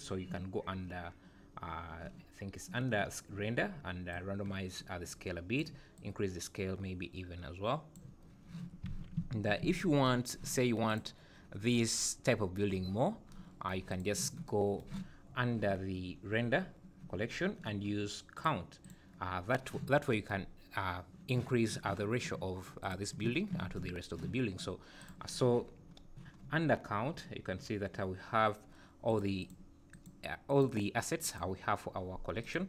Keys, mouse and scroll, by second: 2.0 scroll down 3, 2.5 scroll down 1, 4.1 click, 6.0 click, 8.9 alt+a, 9.2 `, 9.6 `, 10.9 click, 14.0 click, 15.2-15.6 scroll down 5, 16.3-16.7 scroll down 2, 17.2 scroll down 3, 18.4 click, 18.8 click, 19.5 scroll down 1, 20.6 scroll down 1, 22.8 click, 25.0 click, 26.0-27.7 scroll down 13, 29.1 click, 29.4 click, 29.9 click, 30.5 click, 31.2 click, 32.4 click.